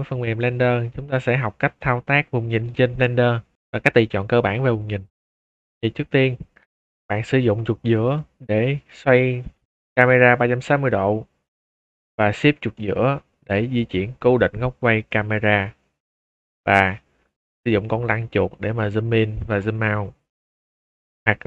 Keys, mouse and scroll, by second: 3.5 middle click, 3.8 shift+middle drag, 4.3-4.7 scroll up 2, 4.7-5.1 middle drag, 8.1-11.7 middle drag, 12.7-16.0 shift+middle drag, 18.7-19.1 scroll up 4, 19.5 scroll down 2, 19.7-20.4 scroll up 2.